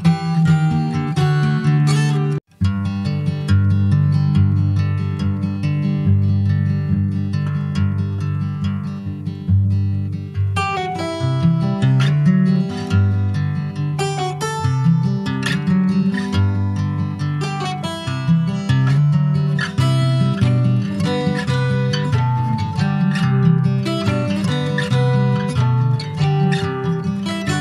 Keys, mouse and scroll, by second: 0.7 click, 2.1 middle click, 2.7 ctrl+s, 3.4 i, 5.3 middle click, 6.2 e, 8.5 middle click, 9.2 i, 11.4 middle click, 12.3 alt+middle click, 12.9 scroll down 3, 13.1 shift+middle click, 13.5 e, 14.8 middle click, 15.2-15.6 scroll up 1, 16.0 2, 16.3 click, 16.5 Tab, 16.9 click, 17.4 ctrl+a, 18.0 shift+middle click, 18.4 scroll up 2, 18.4 Tab, 18.8 middle click, 19.2-19.6 scroll up 1, 19.7 alt+shift+click, 20.5 alt+shift+click, 21.3 alt+shift+click, 21.8 middle click, 22.4 ctrl+b, 25.1 2, 25.2 click, 25.8 alt+shift+click, 26.7 alt+shift+click, 27.2 middle click.